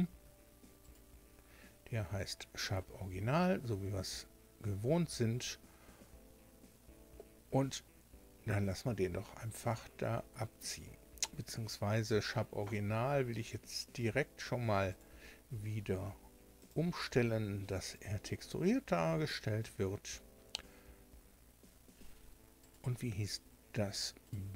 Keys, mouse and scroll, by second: 0.2 Tab, 0.8 click, 14.8 click, 16.6 click, 17.8 click, 22.6 right click, 24.2 right click.